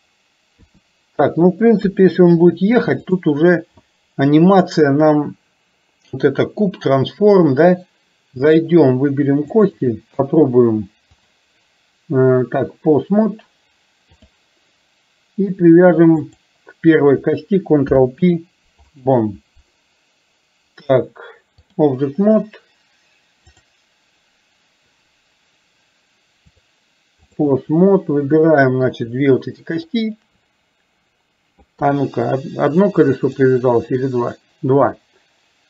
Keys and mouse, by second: 0.7 KP_2, 1.9 KP_3, 3.1 click, 9.7 shift+click, 11.3-14.4 drag, 16.3 click, 17.9 ctrl+p, 21.0 click, 26.7 click, 28.4 middle click, 29.9 shift+click, 31.8 KP_3, 33.4 click, 33.8-35.6 drag.